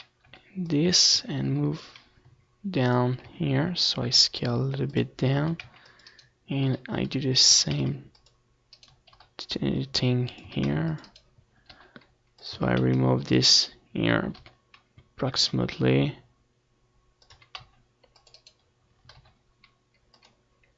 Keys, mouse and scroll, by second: 0.0 c, 1.5-4.8 right drag, 2.1 c, 3.3 g, 4.9-6.6 drag, 5.1 s, 6.9-8.1 drag, 7.2 a, 7.4 c, 8.1 middle click, 8.6 g, 8.8 right click, 9.3 middle click, 9.3 a, 9.5 c, 9.8 click, 10.6 middle click, 11.1-12.2 right drag, 11.1 g, 12.2 a, 12.5 click, 12.5 c, 13.7 g, 14.1 right click, 14.4 a, 14.6 c, 14.9 click, 16.2-17.3 right drag, 16.4 g, 19.2-20.3 drag, 19.2 a, 19.6 c, 20.3 middle click.